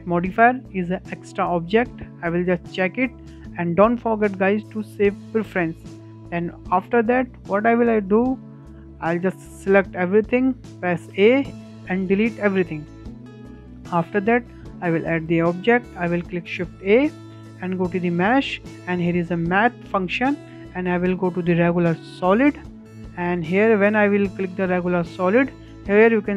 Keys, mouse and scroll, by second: 8.2 click, 8.6-8.9 scroll down 3, 8.9-11.2 shift+middle drag, 11.2 a, 12.5 Delete, 13.4-13.8 scroll up 2, 13.8-16.7 shift+middle drag, 16.7 shift+a, 23.1-23.6 shift+middle drag, 23.6-24.0 scroll up 7, 24.0-25.0 shift+middle drag, 25.0 scroll up 2, 25.2-26.3 shift+middle drag.